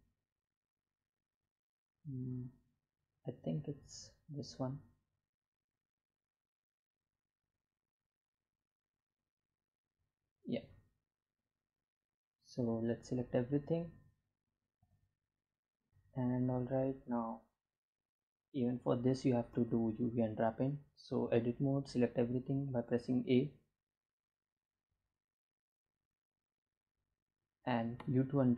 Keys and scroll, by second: 17.9 Tab, 19.5 a, 20.3 u, 23.3 a, 26.0 u.